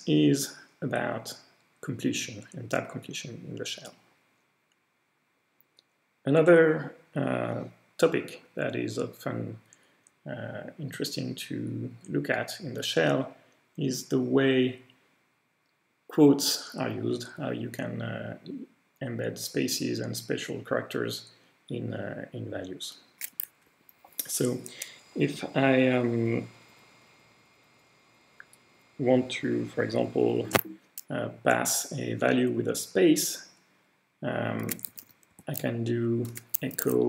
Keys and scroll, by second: 23.7 Delete, 24.1-25.8 Delete, 26.6 Delete, 27.0 Delete, 29.1 Delete, 34.4-37.0 typing.